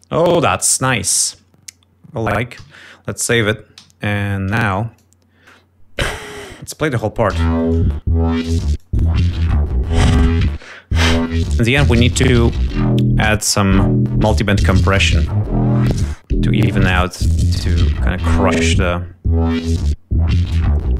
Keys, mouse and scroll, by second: 0.6 g, 0.8 ctrl+scroll down 2, 2.5 ctrl+s, 3.7 g, 4.8-6.0 drag, 6.3 click, 7.7 l, 9.4 click, 10.0 right click, 15.7 click, 17.7 click, 18.9 click, 20.1-20.9 drag.